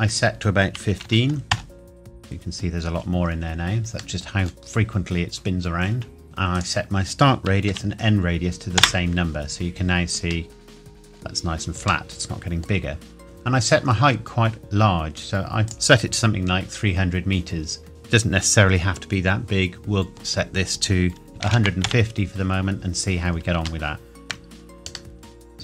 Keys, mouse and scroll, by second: 0.9 KP_1, 1.0 KP_5, 1.5 KP_Enter, 4.2 middle click, 6.6 click, 7.7 KP_2, 8.8 KP_Enter, 10.5 middle click, 14.0-15.6 scroll down 1, 15.7 click, 21.4 KP_1, 21.5 KP_5, 21.6 KP_0, 21.9 KP_Enter, 23.9 shift+middle click, 24.4-25.2 scroll down 1, 25.2 middle click.